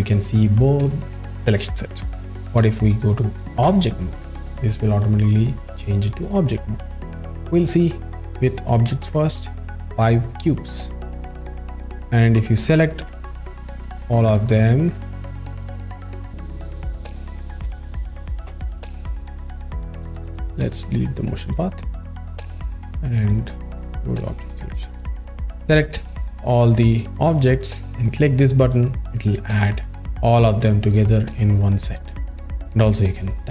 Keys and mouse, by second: 3.7 ctrl+Tab, 17.6 a, 18.5 x, 20.3 drag, 20.9 click, 23.8 drag, 25.0 alt+shift+middle click, 28.6 click, 31.9 click.